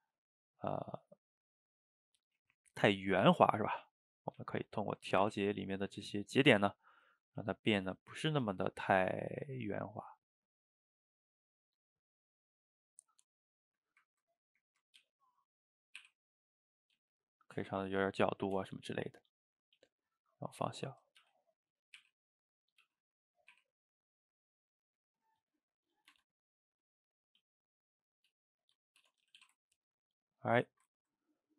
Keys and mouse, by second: 1.8 shift+middle click, 2.4 g, 3.4 click, 3.8 s, 5.2 r, 6.2 click, 6.5 r, 7.4 s, 8.3 click, 8.5 g, 9.8 click, 10.0 g, 11.4-13.4 middle drag, 13.4 shift+click, 13.6 shift+click, 13.8-15.0 shift+middle drag, 15.0 g, 16.0 r, 17.0 g, 18.0-18.6 middle drag, 18.6 Tab, 19.0-19.8 middle drag, 19.8 s, 20.6 middle click, 21.2 g, 22.0 r, 22.8 g, 23.6 r, 24.6-26.1 middle drag, 26.1 Tab, 27.4 s, 28.8 middle click, 29.0 Tab, 29.3 a, 29.4 a, 29.6-30.8 ctrl+middle drag, 30.8 shift+right click, 31.0-31.4 ctrl+middle drag, 31.4 click.